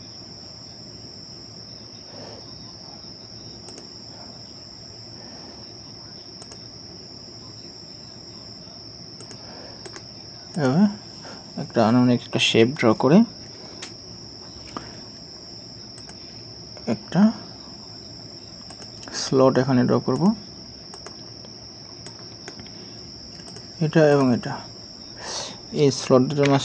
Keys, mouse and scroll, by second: 9.9 right click, 12.0 scroll down 1, 22.1 right click, 26.4 typing.